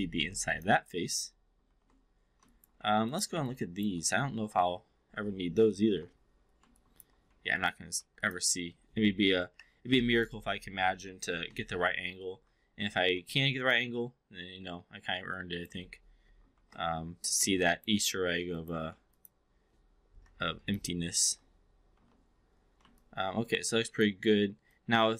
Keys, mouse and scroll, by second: 1.5 shift+i, 2.5 alt+click, 2.8 4, 3.4-3.9 alt+drag, 5.7 shift+i, 6.8 alt+drag, 7.2 4, 7.9 3, 8.2 click, 9.4 Delete, 11.3 shift+i, 12.4 4, 12.8 5, 13.1 4, 13.6 click, 15.2-15.7 alt+drag, 16.5 shift+i, 17.4-17.8 alt+drag, 18.0 4, 18.9 3, 19.2 click, 20.0 Delete, 21.9 shift+i, 23.0-24.0 alt+drag, 24.7-25.1 alt+drag.